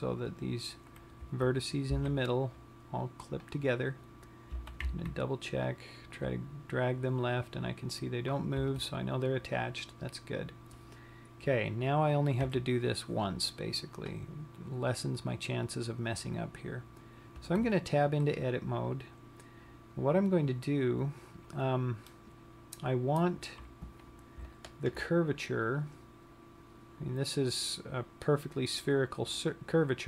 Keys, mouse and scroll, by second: 1.8 Tab, 2.4 b, 5.5 g, 6.9 click, 9.1 Tab, 13.1 KP_3, 18.0 Tab, 19.6-20.9 scroll up 4, 22.3 middle click, 24.9 alt+click, 25.5 scroll down 1.